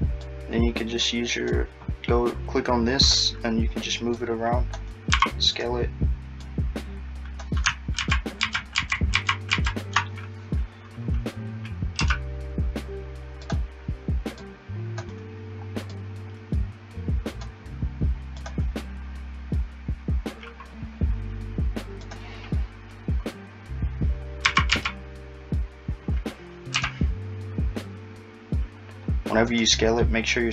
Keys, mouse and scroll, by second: 0.2 click, 4.2 click, 5.1 s, 6.4 click, 8.0 ctrl+z, 8.5 ctrl+z, 8.8 ctrl+z, 9.2 ctrl+z, 9.5 ctrl+z, 12.0 e, 14.4 click, 22.0 click, 24.5 s.